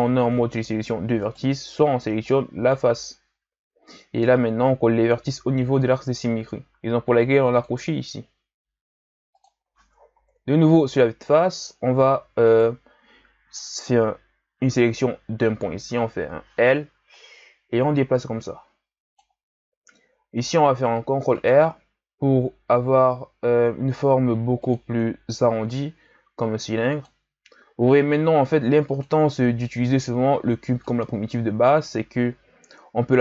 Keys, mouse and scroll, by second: 1.2 alt+right click, 2.3-5.3 drag, 7.5-10.1 drag, 10.1 KP_1, 10.9-11.9 scroll down 3, 11.9 a, 12.5 right click, 15.9 l, 17.1-20.2 drag, 20.4 ctrl+r, 25.4 ctrl+r, 28.4 ctrl+r, 32.5 ctrl+r.